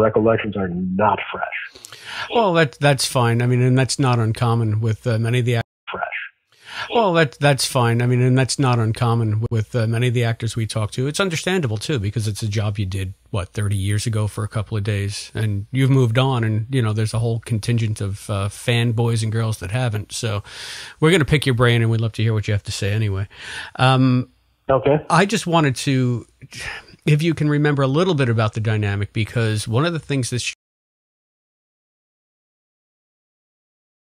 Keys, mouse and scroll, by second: 1.1 click, 2.1 click, 3.2 click, 4.9 click, 5.5 space, 5.7 click, 5.8 space, 8.0-9.1 drag, 9.3 Delete, 10.6 click, 11.2 click, 12.2 ctrl+s, 13.3-14.9 drag, 15.2 click, 16.4 click, 17.0-18.2 drag, 19.0 click, 19.9 click, 20.9 click, 21.6-23.2 drag, 23.6 click, 29.0-30.5 drag, 30.4 space, 31.5 Delete, 31.9 click, 33.0-34.0 drag.